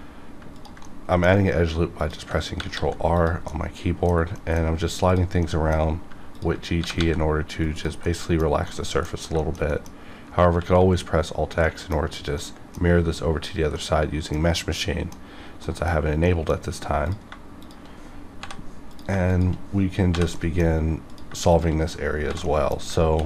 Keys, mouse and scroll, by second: 0.5 ctrl+click, 0.8 middle click, 1.2 scroll down 1, 1.9 ctrl+click, 2.5 g, 2.7 g, 3.1 click, 3.4 middle click, 4.3 middle click, 5.0 click, 5.1 click, 5.4 scroll up 1, 6.3 ctrl+click, 6.7 g, 7.0 g, 7.6 click, 8.0 middle click, 8.4 scroll down 1, 8.7 middle click, 9.1 scroll up 1, 9.2 scroll down 1, 9.4 shift+middle click, 10.5 alt+x, 11.6 middle click, 12.0 scroll up 1, 12.3 middle click, 12.5-13.7 middle drag, 13.7-15.6 middle drag, 16.6-17.0 scroll up 1, 17.0 click, 17.6 shift+click, 18.4 j, 18.9 click, 19.3 shift+click, 20.3 middle click, 21.1 click, 21.5 shift+click, 22.2 click, 22.2 j, 22.4 middle click, 23.1 ctrl+r.